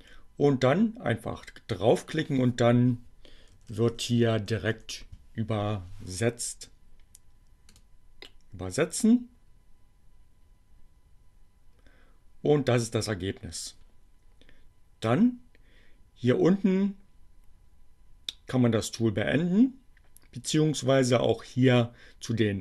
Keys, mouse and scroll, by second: 1.3 a, 3.7 n, 4.3 l, 7.8 click, 21.9-22.6 drag.